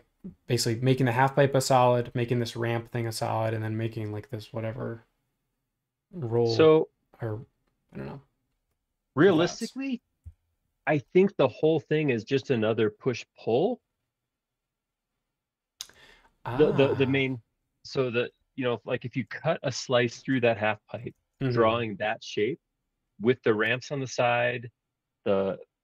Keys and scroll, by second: 10.2 super+-, 19.1 super+Tab, 21.2 super+Tab.